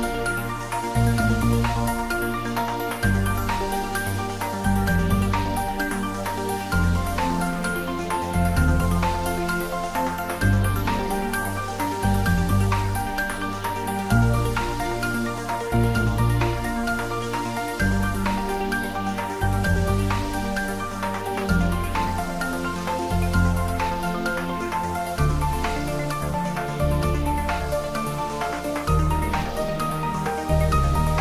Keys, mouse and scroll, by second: 1.9 click, 4.0-5.8 scroll down 1, 5.8 scroll up 1, 7.3-11.1 drag, 12.5 shift+d, 13.5 y, 25.2 Right, 29.2 click.